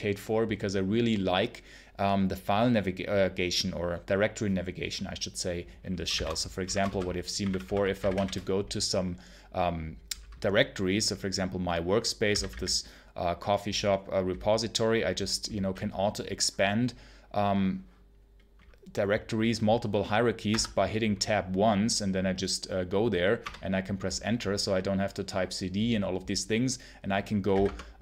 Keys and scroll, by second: 6.0-8.5 typing, 11.9-12.9 typing, 20.4 Tab, 23.3 Return, 27.4 d, 27.5 space, 27.9 Return.